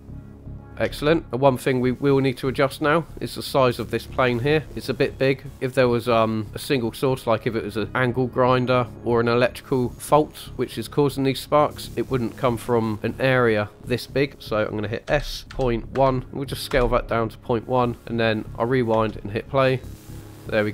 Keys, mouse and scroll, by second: 0.8 space, 4.7-5.1 shift+drag, 4.7 shift+middle click, 5.5 middle click, 11.3-11.9 middle drag, 15.1 s, 15.5 ., 15.9 1, 16.7 Return, 17.4 middle drag, 18.2 click, 18.9 space.